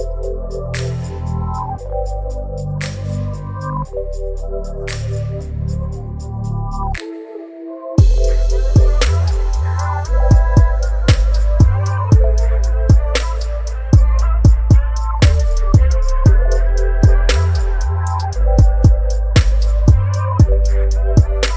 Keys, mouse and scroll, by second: 3.6 click, 10.6 right click, 11.3 click, 17.9 click.